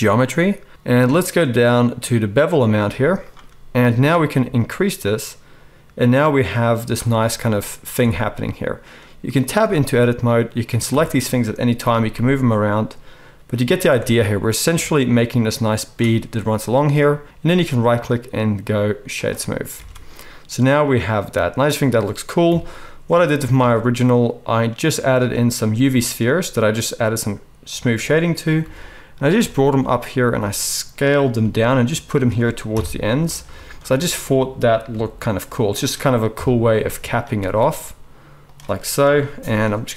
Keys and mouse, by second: 2.9 z, 9.8 Tab, 10.9 a, 11.8 g, 13.9 Tab, 13.9-15.0 middle drag, 15.0-19.2 shift+drag, 17.7-19.2 middle drag, 17.7-19.2 right drag, 19.8 alt+a, 22.4 KP_1, 23.6 shift+a, 25.1-29.2 middle drag, 28.6 g, 29.2 shift+click, 30.0 right click, 30.4 s, 30.9 click, 31.4 g, 31.6 right click, 32.1 click, 32.7 KP_3, 33.2 shift+right click, 34.9 g, 36.3 KP_1, 37.4 s, 37.9 click, 39.0 KP_7.